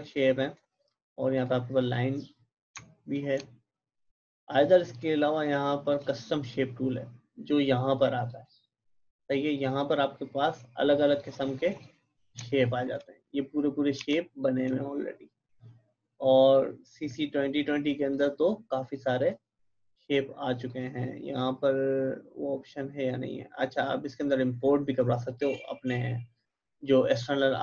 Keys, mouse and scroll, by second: 0.5-1.2 typing, 8.2-13.9 drag, 13.9 v, 14.4-18.1 drag, 27.1-27.6 drag.